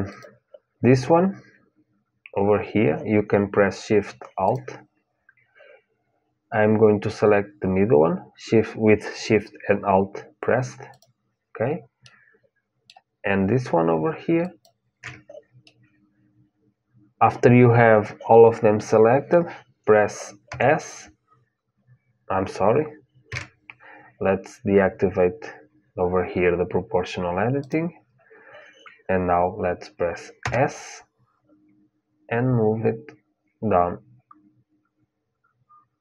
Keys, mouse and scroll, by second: 4.2-6.2 drag, 10.7-12.6 drag, 11.8-14.2 middle drag, 14.2-16.3 drag, 15.4-17.4 middle drag, 20.2 s, 27.3-29.4 drag, 30.1 s.